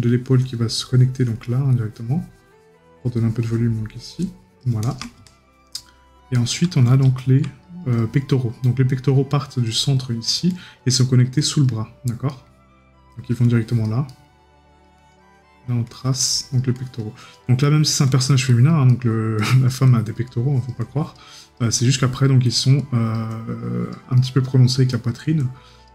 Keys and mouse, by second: 12.3 right click, 14.1 right click, 18.9 right click, 24.2 right click.